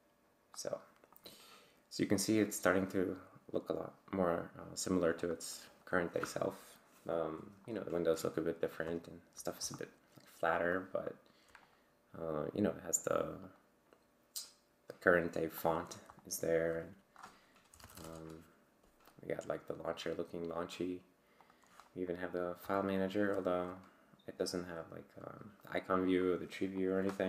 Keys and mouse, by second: 0.6 click, 1.1 click, 2.2-3.6 drag, 5.2 click, 5.9 click, 7.4 click, 8.7 click, 9.8 right click, 10.7 right click, 11.6 click, 13.5 click, 15.6 click, 16.2 click, 17.5-18.4 typing, 21.4 click, 22.8 click, 23.8 click, 26.8 click.